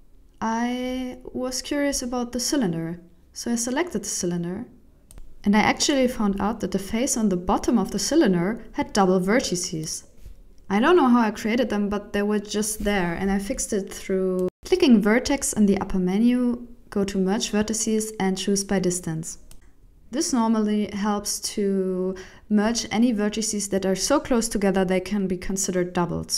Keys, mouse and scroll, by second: 0.4 click, 0.6 click, 2.2 click, 2.6-3.2 scroll down 5, 3.2 click, 3.4-4.0 scroll down 2, 4.0 click, 4.9 middle click, 6.1 scroll up 4, 6.4 middle click, 6.8 right click, 7.0 Tab, 7.6 alt+a, 8.6 ctrl+alt+shift+m, 9.4 scroll down 5, 9.7 middle click, 10.7-11.0 scroll up 4, 11.0 middle click, 11.6 scroll down 2, 11.9 shift+middle click, 12.2 middle click, 14.3 scroll up 4, 16.0 click, 21.1 alt+right click, 21.5 alt+right click, 22.8 shift+e, 25.0-25.4 scroll down 3, 25.4 alt+a, 26.1 ctrl+alt+shift+m.